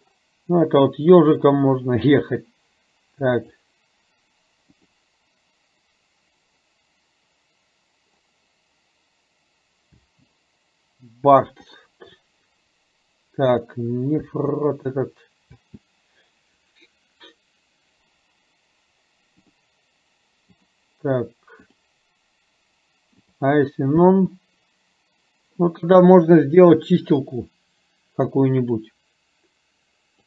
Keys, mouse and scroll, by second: 3.6-5.2 drag, 10.2 space, 11.9-13.9 drag, 14.4 space, 15.7 space, 19.5-20.6 drag, 21.7-23.6 drag, 24.1 space, 28.7-30.2 drag.